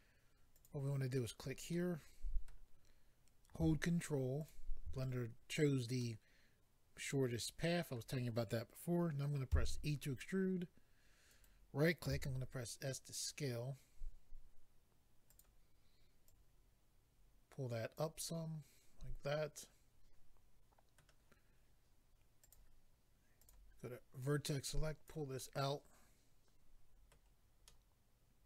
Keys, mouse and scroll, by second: 0.6 click, 1.7 middle click, 4.4 ctrl+click, 4.5 ctrl+click, 6.9 middle click, 10.2 e, 11.3 right click, 11.4 right click, 12.1 s, 15.3 click, 15.4 click, 16.2 click, 18.3 middle click, 22.4 click, 22.5 click, 23.4 click, 23.5 click, 24.2 click, 25.4 middle click, 27.6 middle click.